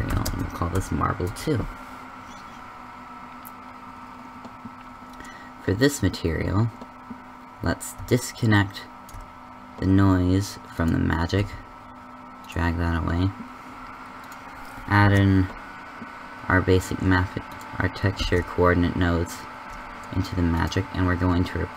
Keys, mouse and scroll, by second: 8.4-10.3 drag, 11.5 g, 15.0 ctrl+t, 18.3 ctrl+x.